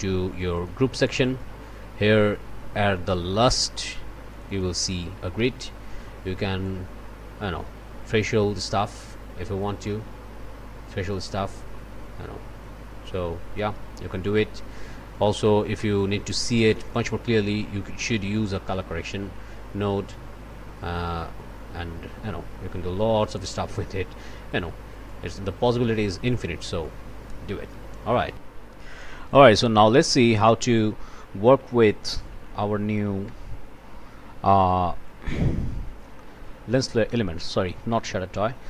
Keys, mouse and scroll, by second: 0.5 click, 1.2 click, 1.8 scroll up 1, 2.5 scroll up 1, 2.9 click, 3.8 scroll up 1, 4.3 click, 8.6-9.8 drag, 9.8-11.1 scroll up 1, 11.1-12.9 drag, 12.9-13.6 scroll up 1, 13.6 click, 14.0-15.1 scroll up 1, 15.8 click, 16.2-16.6 scroll up 1, 16.6 click, 26.8 click, 28.3 click, 29.4 click, 30.0 click, 30.3 Tab, 31.5-33.1 typing, 33.3 Return, 35.1 click, 35.6 1, 37.4 click, 37.9 Delete.